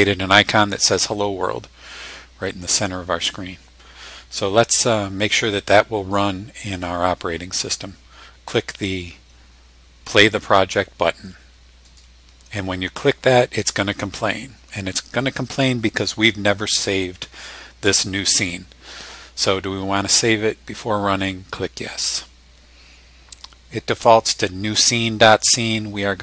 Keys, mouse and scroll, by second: 11.8 click, 21.8 click.